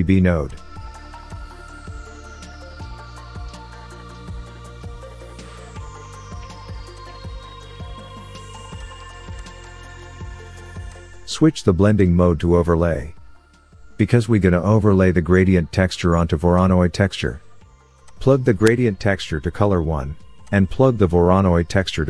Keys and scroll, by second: 4.5 shift+a.